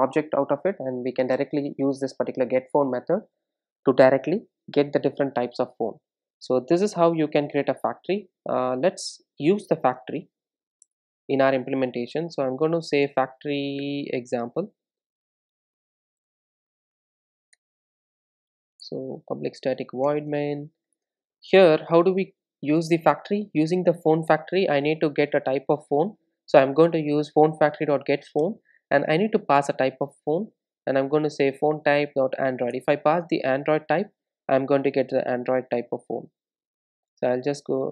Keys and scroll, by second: 13.8 super+n, 20.1 Return, 25.2 Return, 32.8 Return.